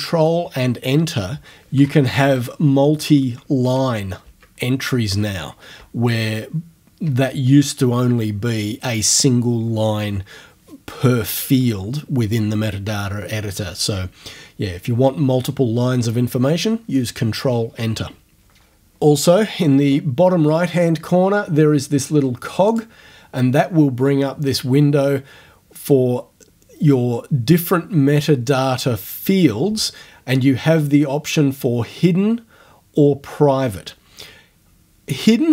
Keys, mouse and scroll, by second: 1.6-2.7 typing, 3.6 Up, 4.2 Down, 5.8 BackSpace, 22.7 click.